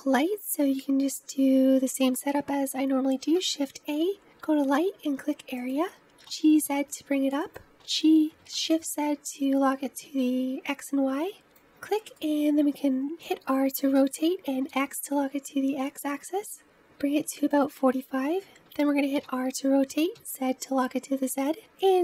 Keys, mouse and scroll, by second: 0.4-4.6 scroll down 2, 6.2 g, 7.7 g, 12.1-13.9 middle drag, 13.9 r, 19.1 r.